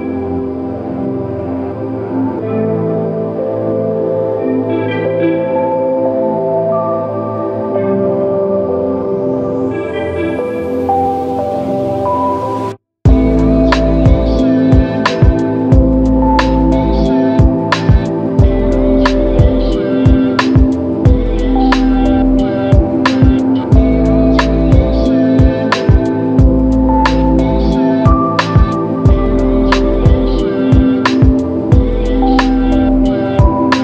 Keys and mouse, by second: 2.2 alt+m, 3.6 g, 5.9 double click, 14.7 click, 16.4 shift+click, 17.3 shift+click, 19.7 shift+click, 20.5 shift+click, 25.1 double click, 28.0 f, 29.7 alt+click.